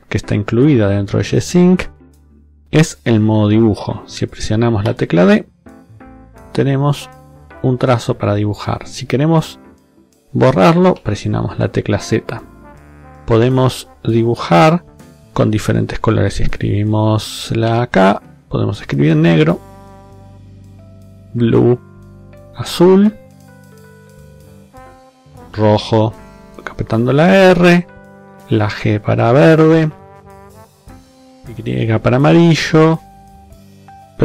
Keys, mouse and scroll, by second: 4.8 d, 5.9 click, 10.8 z, 17.6 k, 18.1 click, 20.5 b, 21.0 click, 25.5 r, 26.2 click, 28.1 g, 28.7 click, 31.0 y, 31.5 click, 33.1 w, 33.7 click.